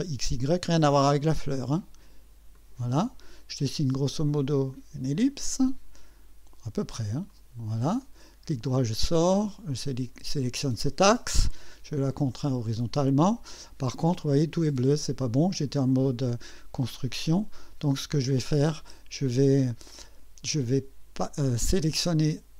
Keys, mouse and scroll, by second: 2.5 click, 4.7 click, 7.3 click, 8.0 right click, 9.8 click, 11.5 click, 17.5 right click, 18.2 click.